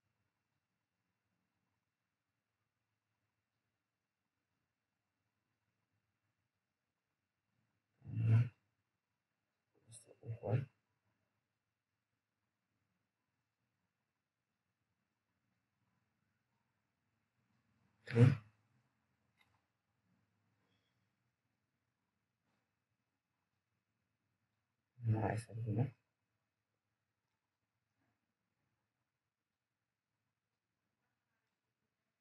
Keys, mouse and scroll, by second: 0.0-0.7 scroll down 1, 2.0 F3, 3.5 click, 3.5 click, 7.2 scroll up 1, 8.0-9.6 scroll down 1, 9.6 click, 9.6 click, 13.5-14.6 scroll up 1, 14.6 click, 15.6 c, 18.4 F3, 23.4 click, 29.8 t, 30.4 scroll down 1, 31.1-31.7 scroll up 1, 31.7 click.